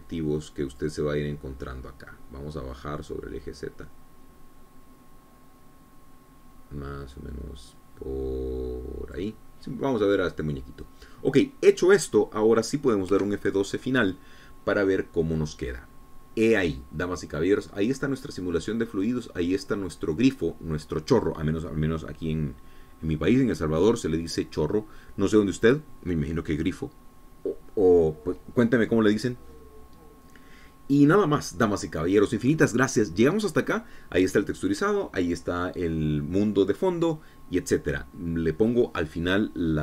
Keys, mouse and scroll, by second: 4.3-10.9 drag, 14.8 F12.